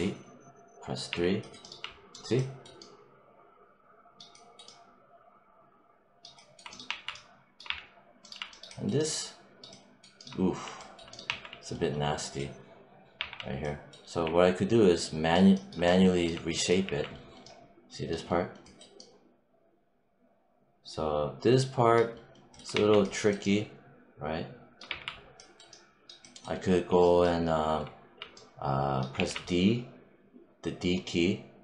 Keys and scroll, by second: 1.0 3, 6.7 1, 7.5 3, 11.1 1, 13.0 3, 14.1 4, 16.7 5, 22.6 1, 24.7 3, 29.0 d.